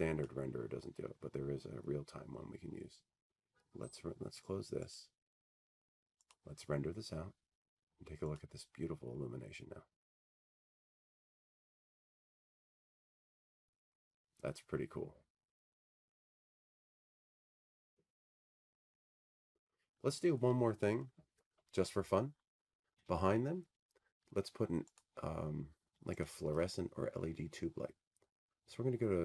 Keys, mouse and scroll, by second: 0.0 click, 2.2 click, 5.8 click, 10.5 click, 12.0 click, 13.9-16.0 drag.